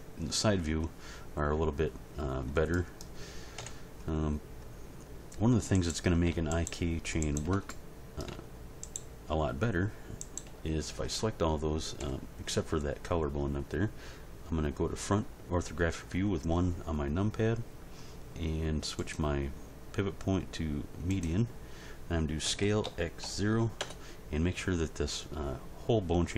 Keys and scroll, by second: 3.6 End, 12.0 End, 22.4 s, 22.8 x, 23.2 0, 23.8 Return.